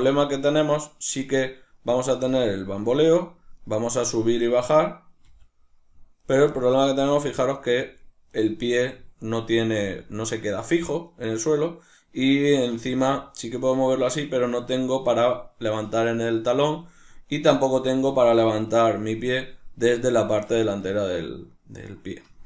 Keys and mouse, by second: 0.1-2.1 right drag, 2.1-3.3 middle drag, 2.1 r, 3.6 right click, 4.0 right click, 4.3 right click, 4.5 right click, 4.8 right click, 5.3 g, 6.3 right click, 7.3-8.5 middle drag, 7.3 g, 8.5 right click, 9.7 g, 11.7 right click, 12.7 r, 13.7 right click, 17.2 right click, 17.9 r, 18.8 right click, 20.9-22.4 shift+middle drag.